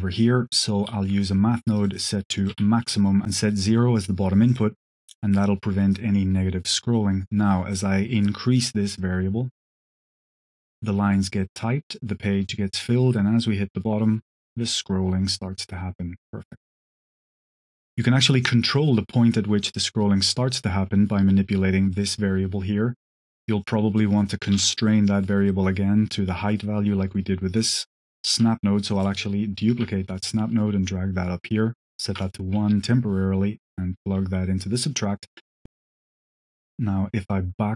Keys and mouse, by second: 0.7 q, 2.3 click, 3.2-4.6 drag, 7.1-9.5 drag, 9.5-17.5 shift+middle drag, 21.8 drag, 23.4 click, 23.8 click, 24.4 g, 25.4 click, 27.4 click, 28.2 ctrl+shift+d, 28.8 click, 29.5 ctrl+click, 30.1-31.3 drag, 32.6 click, 33.7-34.5 drag, 36.2-37.7 shift+drag.